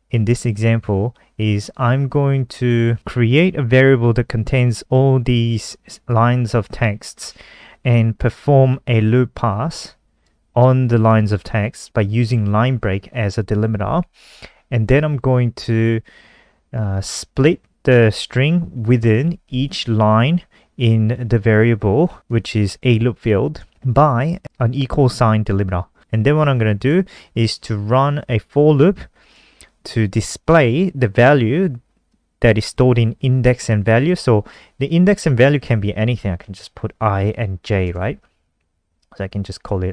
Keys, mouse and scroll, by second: 4.3 click, 8.0 click, 10.1 click, 11.8 click, 23.0 click, 36.7 i, 37.0 ctrl+Right, 38.1 j, 38.5 Down, 38.7 ctrl+Right, 38.8 ctrl+Right, 39.0 ctrl+Right, 39.1 ctrl+Right, 39.3 ctrl+Right.